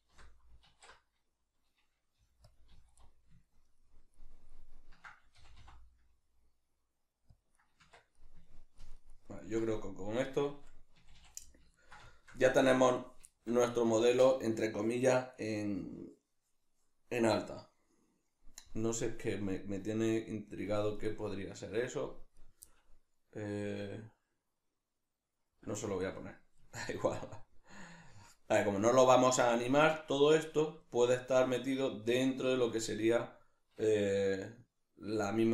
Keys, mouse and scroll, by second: 0.1 l, 2.6 click, 2.7 z, 3.0-7.4 middle drag, 5.4 g, 7.4 click, 7.6-22.4 middle drag, 7.8 Tab, 11.0 a, 22.4 right click, 22.6-35.5 middle drag.